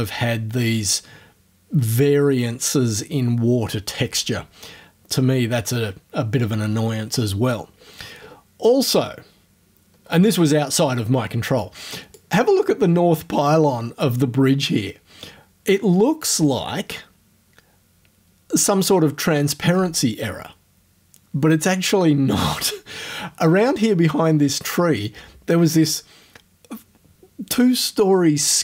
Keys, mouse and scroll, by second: 7.8-8.4 scroll down 4, 9.9 scroll up 2, 11.6 click.